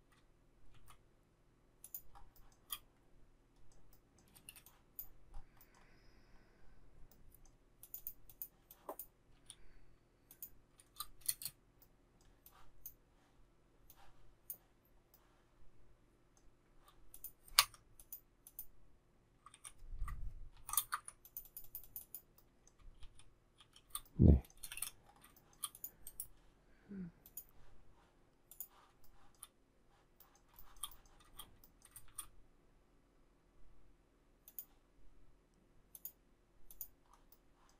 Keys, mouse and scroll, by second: 0.8 shift+c, 1.9 shift+click, 2.1 shift+scroll, 2.4 shift+middle click, 4.3 space, 7.8 click, 9.4 m, 11.3 shift+space, 17.6 Escape, 19.6 ctrl+a, 20.6 ctrl+shift+g, 21.0 Escape, 23.0 shift+s, 24.6 space, 24.7 Escape, 25.4 shift+middle click, 29.1 shift+middle click, 30.6 shift+middle click, 30.8 shift+double middle click, 32.1 shift+x.